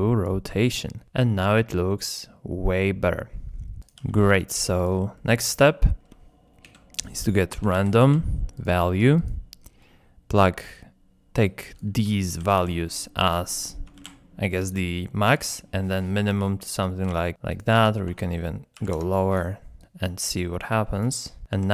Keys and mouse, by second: 1.0-1.6 middle drag, 2.0-3.1 drag, 4.4 ctrl+g, 5.2 click, 5.9 shift+click, 6.6 shift+a, 11.6-13.3 drag, 13.6-14.8 super+drag, 15.3-18.3 super+drag, 17.7 KP_0, 18.7 click, 19.8-21.1 drag.